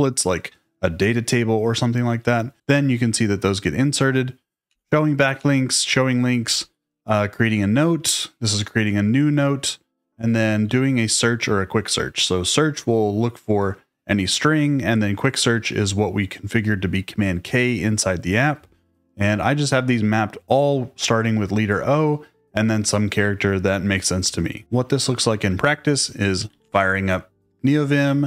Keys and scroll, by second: 2.6 j, 4.6 j, 5.3 j, 10.6 j, 26.1-27.1 typing, 27.3 Return.